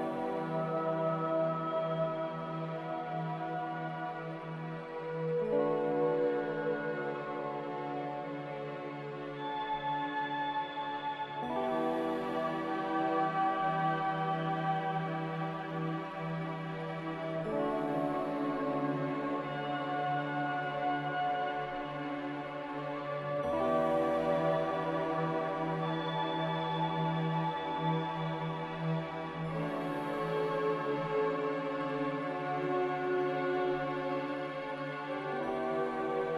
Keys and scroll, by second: 10.0 q, 10.9 q.